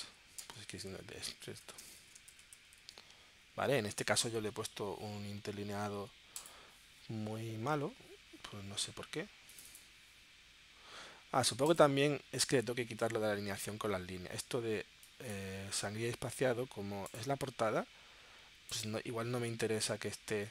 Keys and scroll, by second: 0.4-3.0 typing.